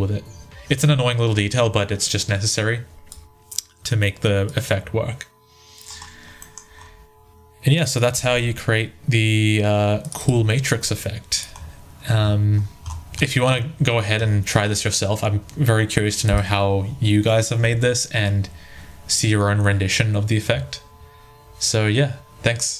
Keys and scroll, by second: 7.9 1.